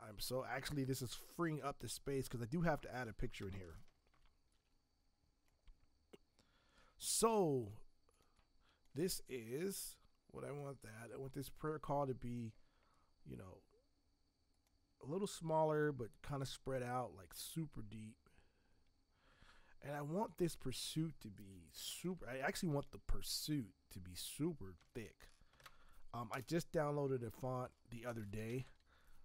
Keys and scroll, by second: 3.3 ctrl+Return, 4.1 v, 22.3 t, 24.7 ctrl+x, 25.5 ctrl+Return, 27.9-29.2 typing.